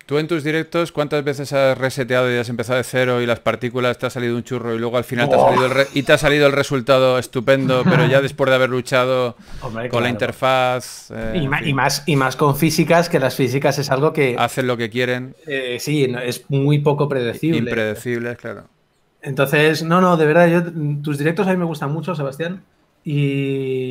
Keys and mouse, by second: 2.1 a, 2.4 ctrl+s, 6.1 KP_3, 7.6 r, 8.6 g, 10.4 a, 11.2 r, 11.6 g, 15.2 ctrl+s, 15.2 a.